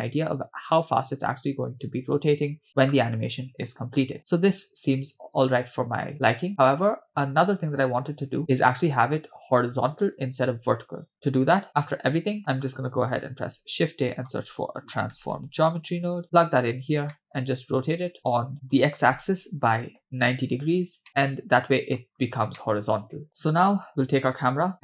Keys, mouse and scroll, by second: 5.2-6.1 scroll down 2, 6.1-7.1 scroll up 2, 9.3 space, 11.1 middle click, 11.7-12.4 scroll down 2, 12.4 click, 13.4 shift+a, 17.1 middle click, 17.5-18.4 scroll up 2, 18.5 click, 18.7-20.0 drag, 21.1-22.0 middle drag, 22.1-22.6 scroll up 2, 22.6-23.3 middle drag, 24.2 click.